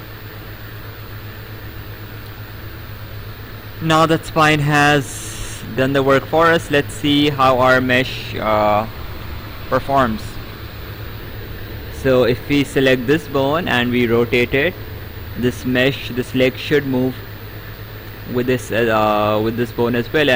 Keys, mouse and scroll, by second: 4.5 right click, 11.4 Escape, 12.1 click, 18.2 click.